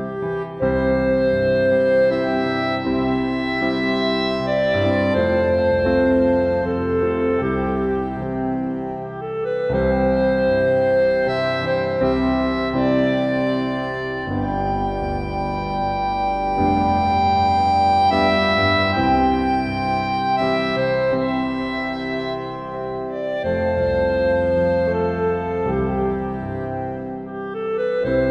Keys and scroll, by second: 1.5 ctrl+u.